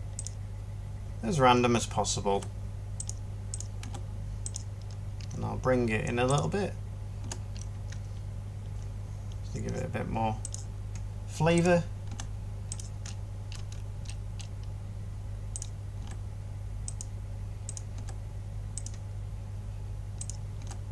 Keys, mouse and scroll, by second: 11.9 g, 15.9 g, 17.8 g.